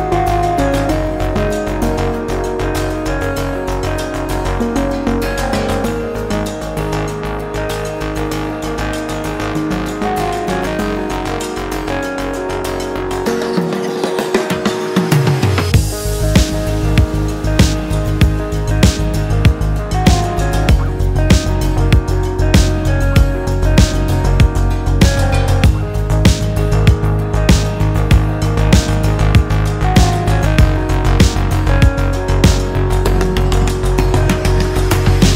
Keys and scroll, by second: 5.6 ctrl+j, 12.2 ctrl+space, 12.8 ctrl+space.